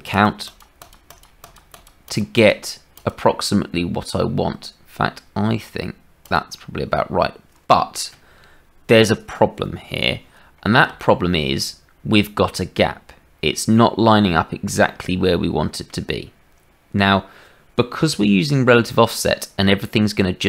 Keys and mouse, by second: 0.1 click, 0.4 click, 0.7 click, 1.0 click, 1.4 click, 2.3 click, 14.8 shift+middle click.